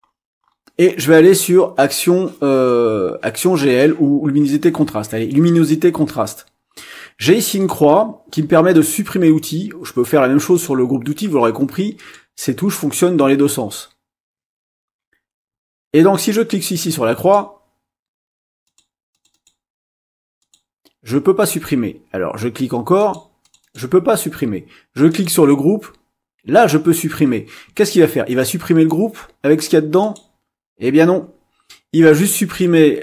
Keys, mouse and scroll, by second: 5.3 click, 10.5 click, 12.0-17.5 drag, 18.7 click, 19.1 click, 20.4 click, 21.4 click, 23.0 click, 23.4 click, 25.1 click, 30.0 click.